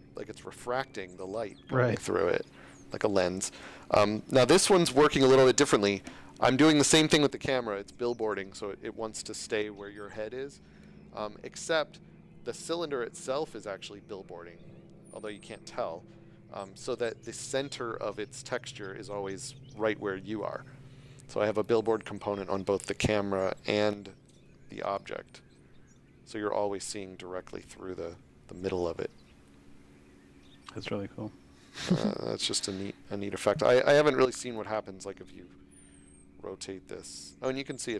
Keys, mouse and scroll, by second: 0.0-0.3 typing, 21.1 d, 21.6 click, 22.2 d, 22.7 d, 26.8-29.9 typing, 33.3 space, 34.5 shift+click.